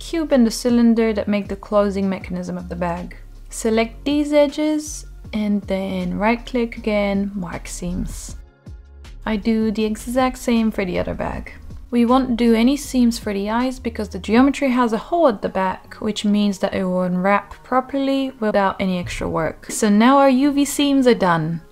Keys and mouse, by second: 0.7 click, 1.4 click, 1.8 shift+click, 2.1-2.8 right drag, 2.9 click, 3.2 middle drag, 3.6 Tab, 4.1 Tab, 4.4 middle click, 4.6 shift+middle click, 5.4 drag, 5.9 shift+drag, 6.1 middle click, 6.3 right click, 7.1 Tab, 8.4 alt+h, 8.8 alt+h, 9.3 click, 9.8 Tab, 10.3 middle click, 10.8 drag, 11.4-11.9 right drag, 12.3 Tab, 12.8 Tab, 13.0 Tab, 13.8-14.1 drag, 14.2 shift+click, 14.6-14.9 right drag, 17.9-18.2 shift+middle drag, 18.5 middle click, 19.4-19.9 drag, 19.9-21.7 middle drag.